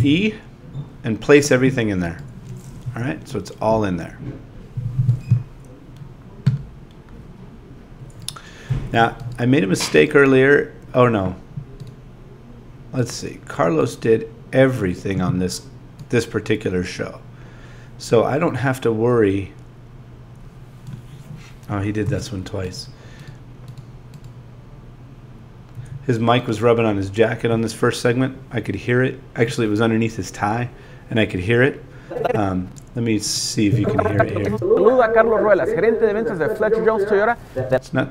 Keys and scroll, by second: 0.0 e, 8.7 z, 22.0 z, 25.8 a, 34.4 space.